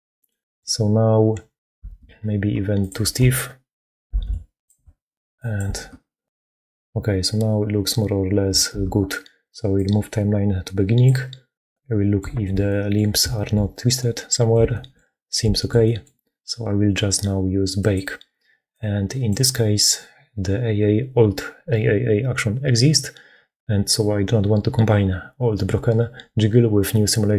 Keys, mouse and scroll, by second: 0.2 click, 1.7 shift+space, 4.1 6, 5.7 shift+space, 8.6 shift+space, 11.6 click, 12.1 shift+middle click, 12.5 click, 12.7 middle click, 12.8 click, 12.9 shift+middle click, 13.6 click, 13.8 middle click, 14.4 shift+middle click, 15.3 shift+middle click, 15.9-17.7 middle drag.